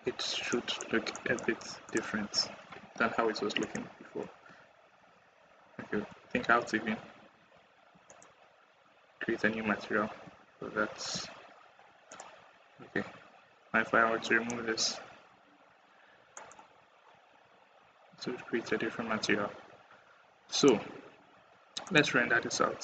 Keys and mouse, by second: 0.3 middle click, 1.1 click, 1.7 click, 3.5 click, 4.6 ctrl+z, 4.9 ctrl+z, 5.3 ctrl+z, 5.8 ctrl+z, 6.2 ctrl+z, 6.8 ctrl+z, 7.3 ctrl+z, 10.6 ctrl+z, 14.1 drag, 16.2 click, 20.4 click, 21.7-22.8 drag.